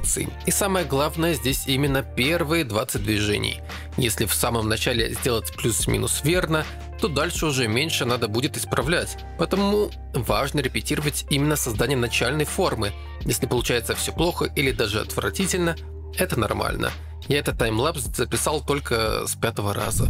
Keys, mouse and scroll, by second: 1.6 KP_3, 1.6 KP_1, 1.8 KP_3, 3.0 click, 3.0 f, 15.4 click.